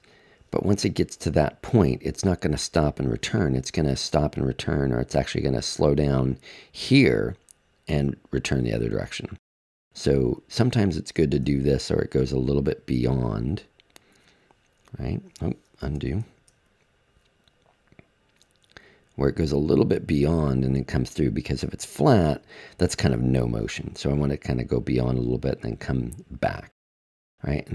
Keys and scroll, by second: 15.8 super+z.